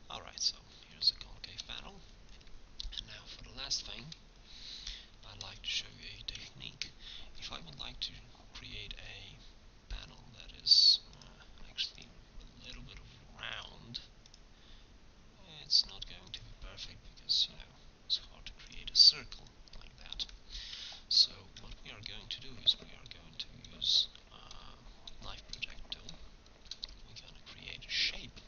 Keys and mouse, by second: 3.0 KP_1, 6.6 Tab, 9.0 k, 21.5 Tab, 26.6 shift+a.